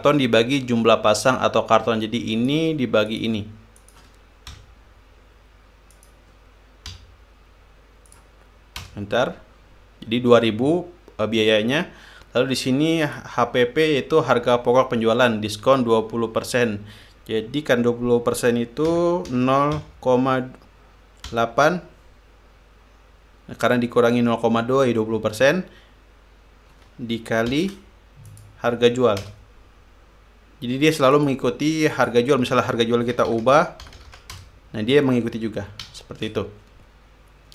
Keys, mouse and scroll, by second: 2.9 click, 3.7 click, 4.4 click, 5.2 =, 6.5 click, 7.5 /, 8.7 click, 9.4 Return, 12.4 scroll up 2, 13.7 click, 19.3-20.9 typing, 21.9 8, 28.1 shift+8, 28.9 click, 29.8 Return, 31.7 click, 32.5 click, 33.5-34.4 typing, 34.9 Return, 36.5 ctrl+z.